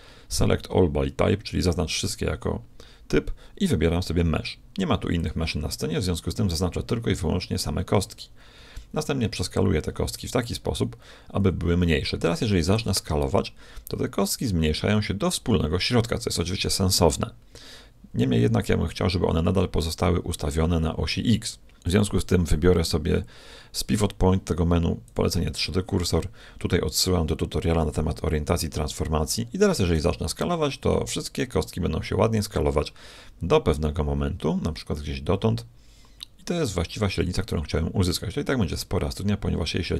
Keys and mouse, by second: 8.5 KP_1, 12.6 s, 21.8-23.8 drag, 29.9 s, 38.6-39.9 middle drag.